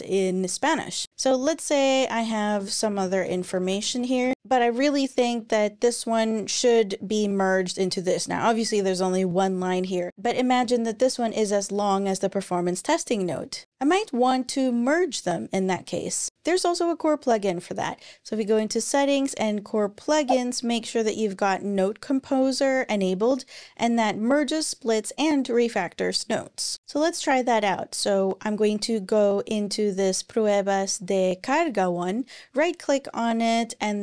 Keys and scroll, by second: 2.1-4.7 typing.